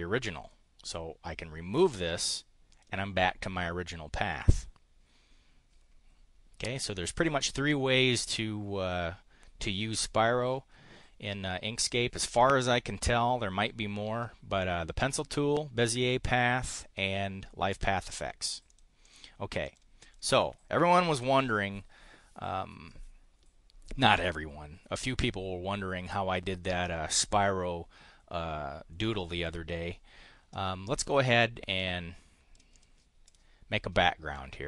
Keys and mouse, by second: 1.7 click, 2.7 click, 18.7 click, 19.0 click, 19.6 click, 19.9 click, 21.2 Delete, 31.7 click, 32.5 click, 33.2 click.